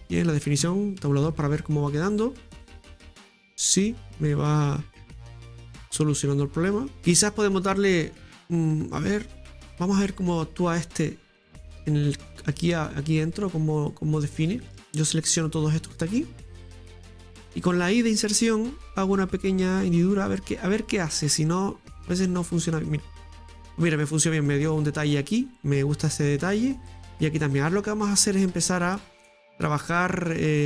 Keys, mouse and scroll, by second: 1.0 Tab, 1.3 scroll down 2, 1.6-4.6 middle drag, 8.5 scroll up 1, 8.9 Tab, 9.2-11.3 scroll up 2, 11.3-12.6 drag, 12.6-13.8 right drag, 13.7 click, 14.4 right click, 14.7 shift+right click, 15.0 shift+right click, 15.3 right click, 15.6 right click, 15.9 right click, 16.1 right click, 16.8 right click, 17.1 right click, 17.7 right click, 18.8 i, 21.9 click, 22.6 middle click, 23.3 Tab, 27.4 scroll down 1, 27.7-29.7 middle drag, 29.7 Tab, 30.0-30.4 scroll up 2, 30.4 shift+middle click.